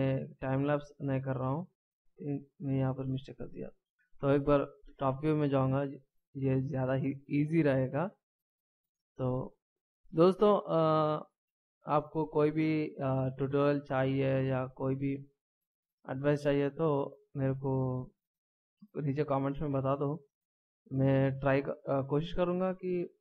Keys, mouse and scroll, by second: 1.2 shift+right click, 1.8 ctrl+z, 2.3 ctrl+z, 3.8 scroll up 2, 3.9 middle click, 4.8 KP_7, 6.4 scroll down 1, 7.3 shift+scroll up 1, 9.7 shift+right click.